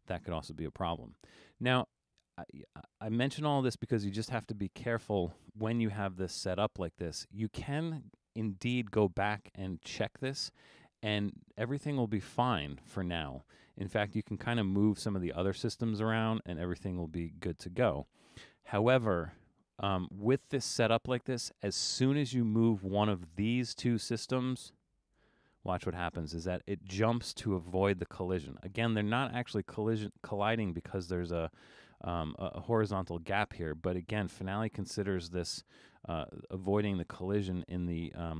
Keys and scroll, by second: 17.8 super+z, 18.2 super+z.